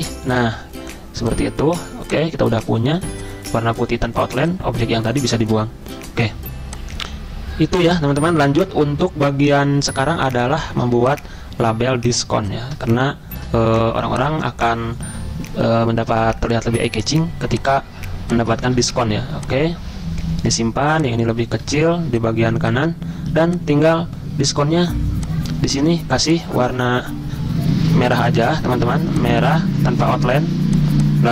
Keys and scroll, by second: 5.3 Delete, 23.3 z.